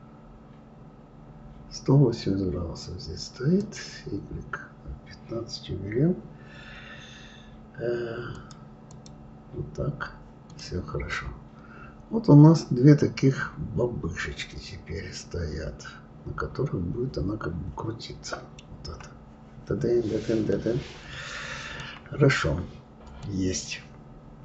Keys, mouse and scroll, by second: 3.6-6.7 drag, 8.9 click, 10.5 click, 11.1-14.1 middle drag, 20.5-24.4 middle drag.